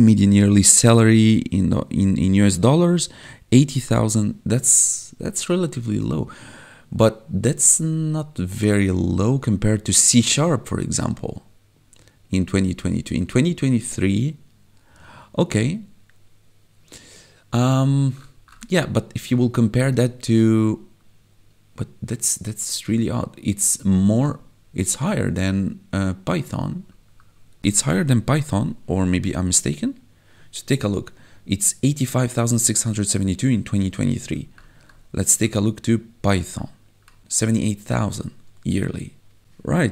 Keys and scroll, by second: 28.6 ctrl+1, 34.3 1, 37.2 1.